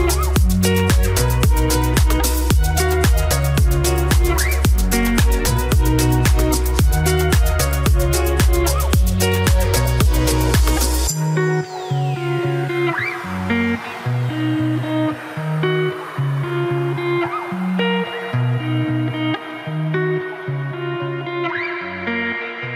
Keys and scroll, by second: 5.2 Delete, 9.5 Delete, 10.0 Delete.